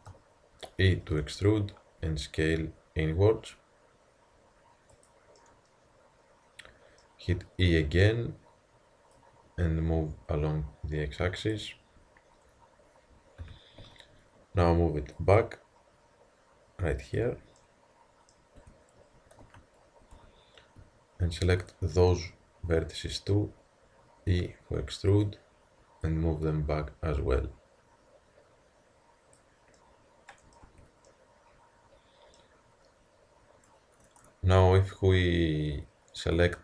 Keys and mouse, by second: 0.9 e, 2.0 s, 5.4-5.8 middle drag, 7.7 e, 9.1-11.0 drag, 11.8-13.1 middle drag, 13.4 KP_1, 13.8 z, 15.2-17.0 drag, 17.6-18.6 middle drag, 18.6 Tab, 19.4 z, 20.2 Tab, 21.6-22.2 drag, 23.5 middle click, 24.3 e, 26.1-28.0 drag, 30.7 Tab, 36.3 a.